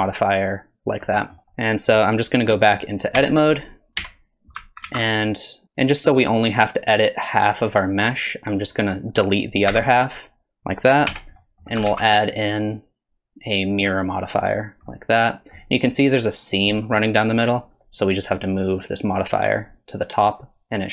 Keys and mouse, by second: 1.1 middle click, 1.4 alt+z, 1.4 Tab, 1.5-1.9 middle drag, 2.5 middle drag, 3.2 Tab, 4.0 KP_1, 4.8 alt+z, 6.4-8.1 drag, 9.7 x, 11.1 Tab, 11.4 middle drag, 11.9 alt+z, 12.6-14.4 drag, 14.9-15.6 middle drag, 16.8 drag, 18.8 click.